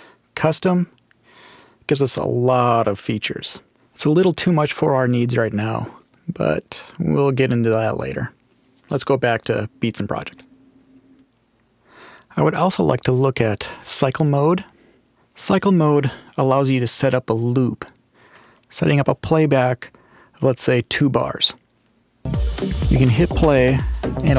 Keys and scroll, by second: 22.1 space.